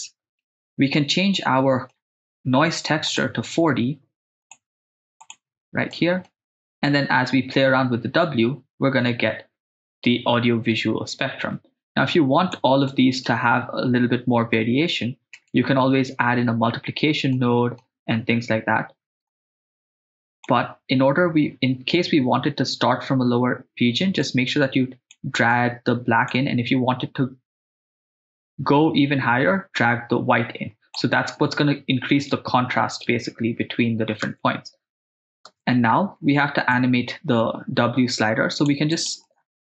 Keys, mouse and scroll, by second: 1.1 middle click, 3.0 click, 4.4-5.3 drag, 5.9 middle click, 6.9-8.9 drag, 12.9 middle click, 14.5 middle click, 15.4 right click, 17.3 middle click, 19.3-20.5 drag, 24.2 click, 25.5 click, 28.0 click, 34.3 shift+space, 35.5 shift+space, 36.7 click, 38.9 click.